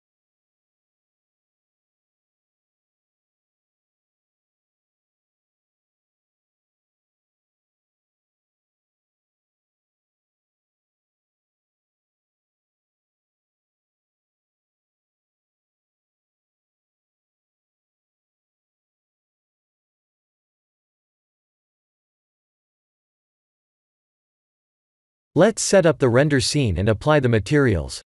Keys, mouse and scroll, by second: 1.0 click, 1.6 middle click, 2.4-3.4 scroll up 12, 3.7 middle click, 4.6 click, 6.0 ctrl+3, 8.5 Tab, 9.7-10.3 scroll down 6, 10.7 click, 14.7 click, 15.7 Tab, 17.1 click, 17.5-17.9 scroll down 7, 18.3 middle click, 20.0 shift+middle click, 20.1 middle click, 22.2 click, 23.8 click, 24.1 click, 24.5 click, 25.0 ctrl+s, 26.5 shift+z, 26.9 b.